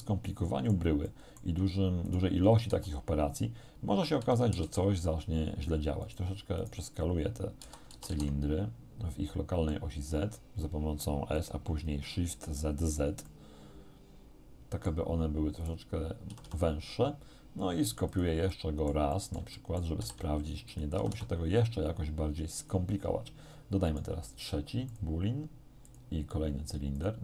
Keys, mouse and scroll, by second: 1.1 shift+middle click, 2.1 right click, 2.7 s, 4.3 shift+z, 6.1 right click, 6.7 right click, 7.7 s, 8.1 shift+z, 11.4 click, 13.3-15.1 middle drag, 15.7 right click, 16.3 r, 18.1 click, 19.5 shift+middle click, 20.1 shift+d, 20.7 click, 21.0 r, 22.7 click, 23.9 right click, 24.9 click, 25.9 click, 27.0 click.